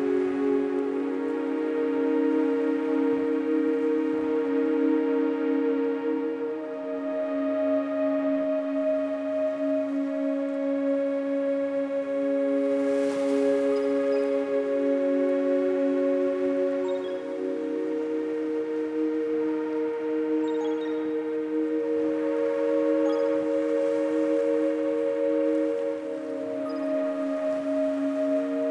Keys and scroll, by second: 9.6 KP_3, 11.1 Tab, 12.9 -, 13.4 KP_4, 14.2 Tab, 15.4 KP_4, 15.7 KP_6, 16.8 Tab, 17.6 KP_8, 17.8 KP_6, 18.6 Tab, 20.0 KP_6, 20.4 KP_0.